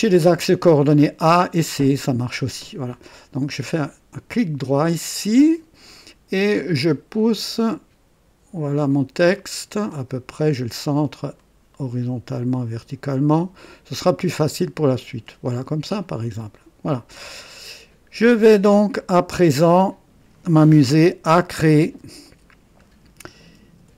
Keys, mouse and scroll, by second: 1.2 click, 3.3 right click, 5.1 click, 7.1-10.6 drag, 11.4-13.8 drag, 14.6 click, 15.9 click, 17.6 right click, 18.3-20.4 drag, 21.8 KP_2, 22.4 scroll up 1, 23.6-23.9 typing.